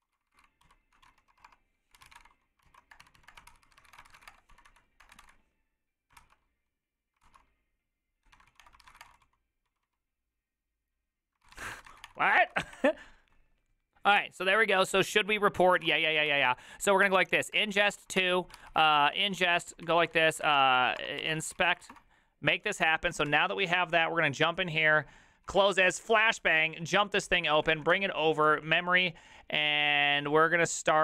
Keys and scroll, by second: 0.0-5.7 typing, 2.6 ctrl+y, 7.0-12.7 typing, 12.0 Return, 12.5 ctrl+c, 12.7 Return, 15.9 ctrl+a, 15.9 3, 16.3 ctrl+c, 17.0 Up, 17.5 space, 17.9 2, 18.2 Return, 18.5 ctrl+c, 18.7 ctrl+c, 18.8 Up, 19.0 ctrl+Left, 19.1 ctrl+Left, 19.4 ctrl+Left, 19.7-22.2 typing, 23.3 alt+[, 25.2-25.9 typing, 27.3 alt+r, 27.3 space, 27.5 Right, 27.6 Right, 27.7 Right, 27.9 Escape.